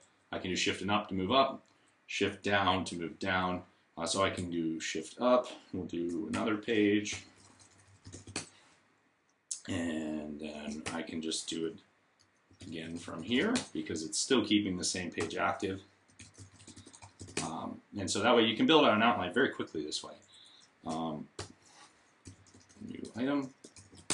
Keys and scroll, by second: 6.6-8.4 typing, 10.7 shift+a, 11.7-13.8 typing, 15.0-17.4 typing, 21.2-24.1 typing.